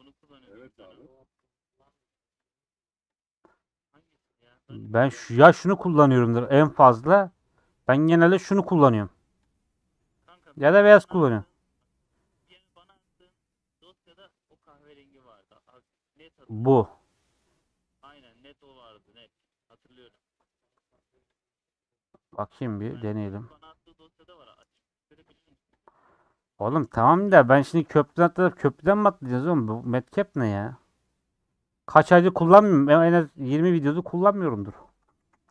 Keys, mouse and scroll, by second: 2.3-26.6 drag, 26.6-33.0 middle drag, 33.4-34.9 middle drag, 34.9 Tab, 35.2-35.5 typing.